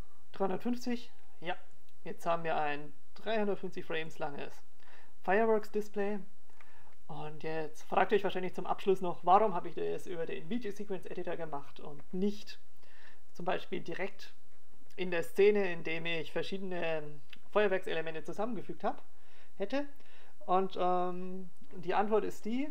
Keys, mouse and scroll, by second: 15.3 click, 22.1 right click.